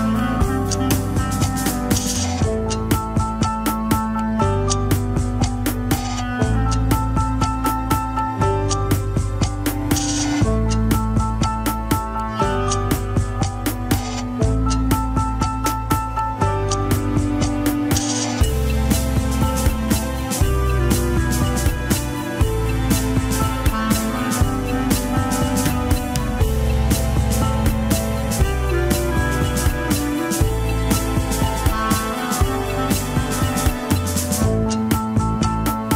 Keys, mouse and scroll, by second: 0.0 ctrl+Tab, 0.2 shift+click, 0.5 ctrl+Tab, 1.2 alt+z, 2.2 ctrl+click, 2.3 alt+z, 2.6 scroll down 2, 3.1 alt+z, 3.6 alt+z, 5.8 ctrl+click, 7.8 ctrl+click, 7.8 alt+z, 9.9-13.8 drag, 13.8 shift+z, 15.7 middle click, 16.4-18.0 drag, 18.0 ctrl+KP_1, 18.9 click, 19.5 scroll down 2, 20.0-23.8 drag, 23.8-24.3 scroll up 2, 24.4 alt+z, 25.6-26.8 drag, 27.9 ctrl+click, 28.0 alt+z, 28.9 alt+z, 30.1 ctrl+click, 30.2 alt+z, 30.7 click, 31.1 scroll down 2, 31.5 middle click, 31.8-32.1 scroll up 1, 32.1-33.9 drag, 33.9 middle click, 34.3-34.7 scroll up 1, 34.7-35.8 drag, 35.8-35.9 middle drag.